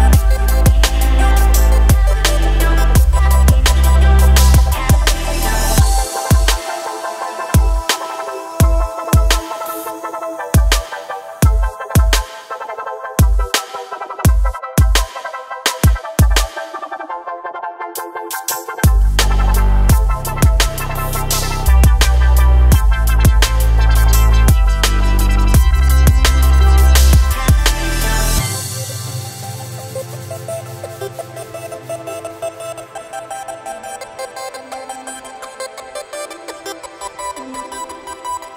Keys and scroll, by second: 4.2 ctrl+r, 15.2 ctrl+z, 17.8 typing, 27.3 g, 27.6 y, 32.2 g.